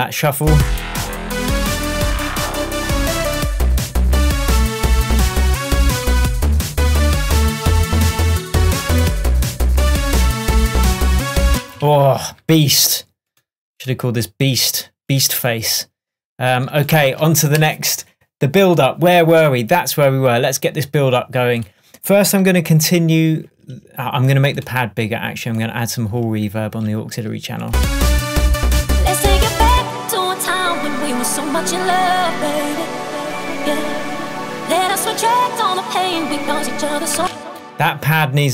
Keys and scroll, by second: 9.9 shift+Tab, 11.8 shift+super+space, 11.9 super+s, 17.1 super+s, 37.2 space.